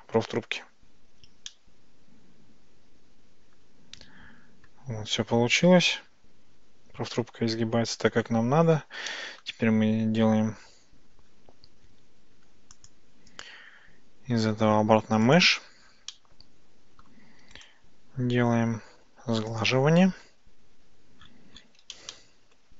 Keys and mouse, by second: 1.6-4.8 middle drag, 5.6-7.2 shift+middle drag, 9.2-9.5 shift+middle drag, 12.9-15.4 drag, 16.2-17.1 middle drag, 22.2-22.6 shift+middle drag.